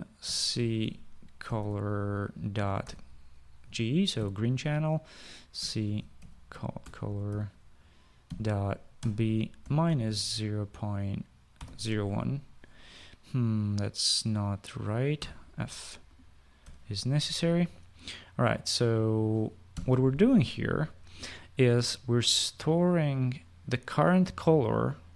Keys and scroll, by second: 0.4-4.6 typing, 5.8-12.6 typing, 15.4-17.1 typing, 20.1 ;.